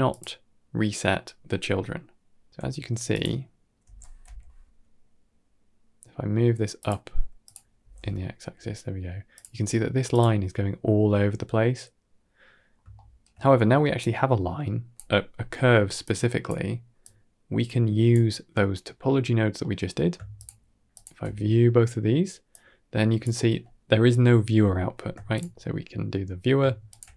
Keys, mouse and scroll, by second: 0.0 click, 2.1 shift+middle drag, 3.0 click, 3.7 g, 7.3 click, 7.7 g, 10.0 click, 12.5 scroll down 3, 12.8 shift+middle click, 13.3-13.8 scroll down 1, 13.8 click, 15.5 middle click, 15.9-16.3 drag, 17.0 click, 19.5 middle click, 20.2 ctrl+shift+click, 22.4-22.9 drag, 24.5 middle click, 25.9 ctrl+shift+click.